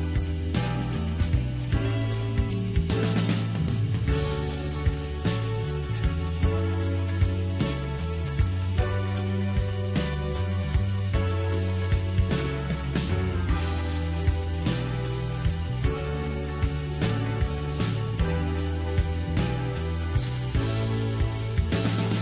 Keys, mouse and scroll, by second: 0.0-0.3 scroll down 4, 0.3-1.4 middle drag, 1.4-2.6 scroll up 2, 2.6 click, 3.3-3.7 scroll down 1, 3.7-5.3 middle drag, 5.3-5.9 scroll up 2, 5.9-9.1 middle drag, 9.1-12.1 drag, 12.1-12.9 scroll up 5, 12.9-15.3 middle drag, 15.3-15.7 scroll up 2, 15.7-16.7 middle drag, 16.7-17.2 scroll down 2, 17.2-17.8 shift+middle drag, 17.8-19.2 scroll up 2, 19.2-21.4 scroll up 1.